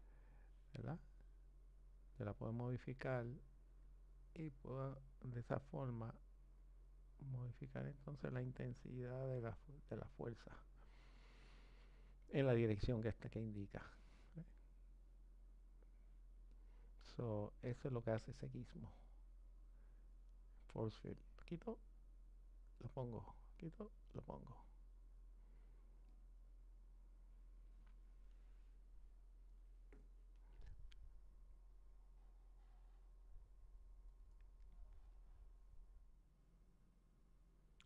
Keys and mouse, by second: 1.4 click, 15.3 click, 16.6 click, 21.4 click, 26.1 click.